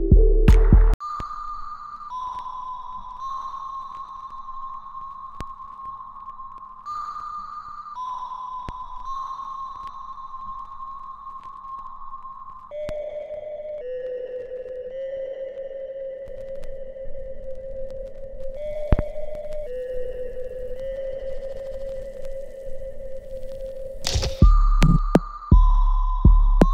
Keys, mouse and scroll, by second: 1.3 right click, 4.5 click, 6.8 click, 7.6 alt+middle click, 9.1 click, 9.4 right click, 10.2 click, 10.2 click, 10.7 shift+click, 12.0 click, 14.0-15.7 ctrl+drag, 18.4-23.4 ctrl+drag, 25.7 ctrl+click.